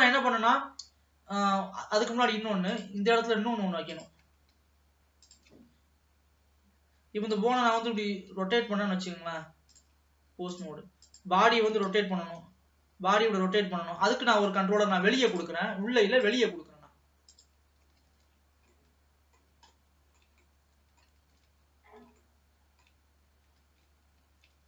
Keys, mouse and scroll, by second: 2.0 scroll down 2, 2.3 middle click, 2.8 click, 3.2 Tab, 3.7 scroll up 1, 3.9 click, 4.6 shift+s, 7.6 r, 9.9-11.7 drag, 12.0 r, 15.3 ctrl+s, 15.5-17.5 drag, 18.2 ctrl+s, 18.9-21.4 middle drag, 21.4 ctrl+s, 21.8-22.3 scroll up 1, 22.3 shift+middle click, 23.2 scroll down 1, 23.8 ctrl+s.